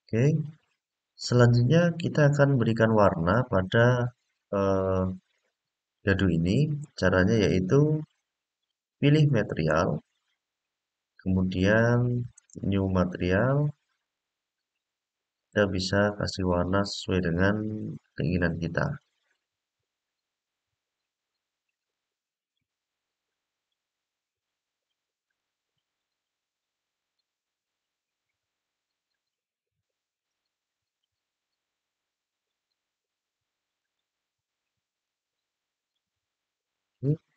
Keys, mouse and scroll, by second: 5.1-6.6 middle drag, 7.8-8.4 scroll down 3, 9.5 click, 12.3 click, 13.8 click, 15.3 click, 18.8 click, 21.5 click, 25.0-26.9 drag, 29.9-30.7 middle drag, 33.5 click, 34.8 click.